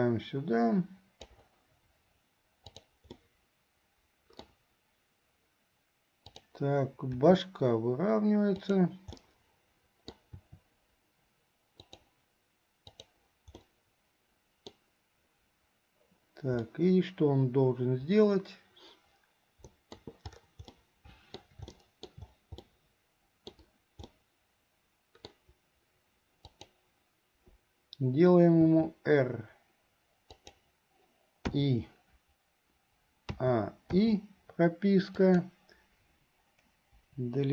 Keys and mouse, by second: 2.7 click, 3.3-4.7 middle drag, 6.3 click, 7.3 r, 9.4 click, 10.5 r, 13.0 click, 13.8-14.9 middle drag, 16.7-20.1 middle drag, 20.9 middle click, 22.0 shift+middle click, 22.9 middle click, 24.3-25.5 middle drag, 26.6 click, 28.7 r, 31.7 i, 33.5 a, 34.2 i, 35.2 click, 37.1 Delete.